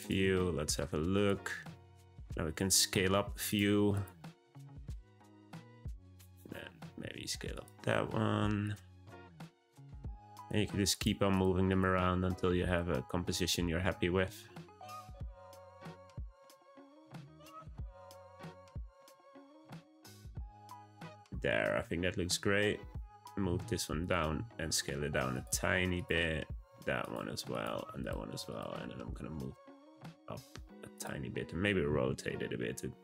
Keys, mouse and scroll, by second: 0.3-1.1 shift+middle drag, 1.1 click, 1.6 s, 2.7 click, 2.9 s, 3.9 click, 4.2 s, 4.9 g, 6.3 click, 7.0 s, 7.9 r, 9.1 r, 10.3 click, 10.5 g, 11.3 click, 11.7 click, 12.6 click, 13.1 b, 14.2 g, 15.1 click, 15.5 s, 16.6 click, 17.0 s, 17.9 g, 18.8 click, 19.1 g, 20.5 click, 23.1 click, 23.3 g, 24.3 s, 25.9 click, 26.5 g, 27.5 click, 27.7 g, 28.5 click, 28.7 g, 31.9 r.